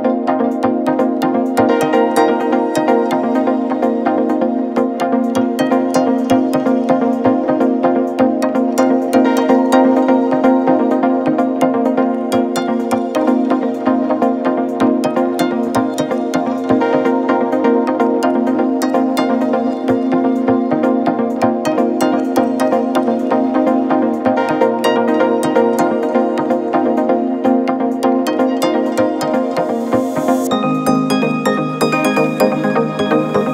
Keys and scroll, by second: 3.2 3, 17.7 Delete, 19.5 Escape, 23.3 4, 24.6 3, 26.2 ], 31.8 4.